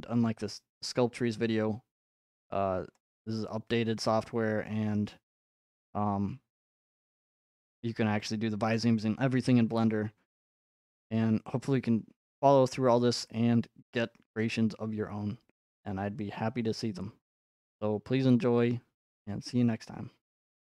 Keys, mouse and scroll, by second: 0.9 click, 2.1-2.9 scroll, 4.2 middle click, 5.4 middle click, 10.8 click, 12.3-14.5 scroll, 14.5 scroll, 14.6 middle click, 19.5 right click.